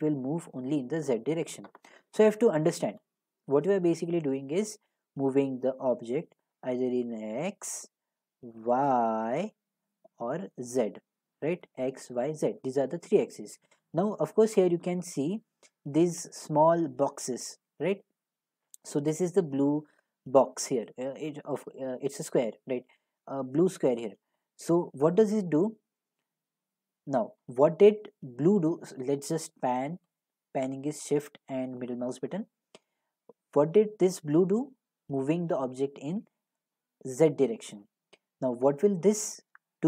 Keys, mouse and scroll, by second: 2.1 click, 2.3-6.6 middle drag, 2.3-6.4 scroll, 6.4-9.9 drag, 11.4 click, 12.2 click, 12.5-14.0 middle drag, 14.5 scroll, 14.9 middle click, 15.2 middle click, 15.3 middle click, 16.7 middle click, 26.7 middle click, 27.4 click, 32.1 shift+middle click, 37.1 shift+middle click, 37.7 click, 38.3 click.